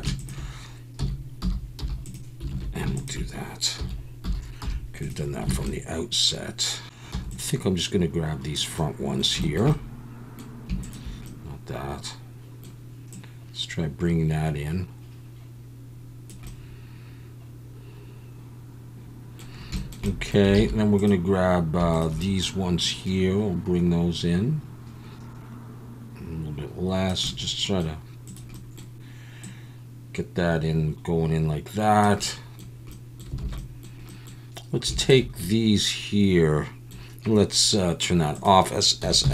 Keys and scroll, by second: 1.0 s, 1.4 y, 1.8 0, 2.5 alt+a, 3.8 s, 4.2 y, 4.6 0, 5.5 alt+a, 7.1 ctrl+z, 7.1 alt+a, 7.3 b, 20.5 alt+a, 33.4 alt+a, 39.0 s, 39.2 x.